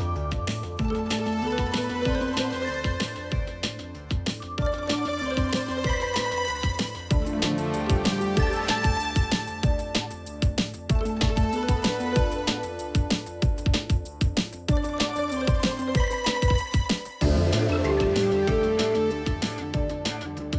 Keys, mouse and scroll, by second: 11.9 space, 17.2 Up, 18.8 click, 19.7 ctrl+shift+].